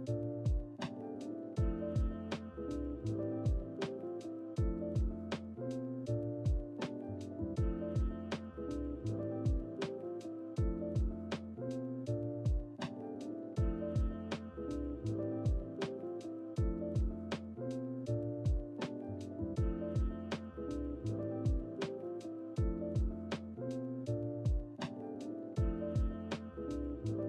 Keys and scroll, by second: 0.0-1.5 typing, 14.7 ctrl+c, 14.9 Escape, 16.9 ctrl+v, 17.0 Return, 23.9-26.4 typing.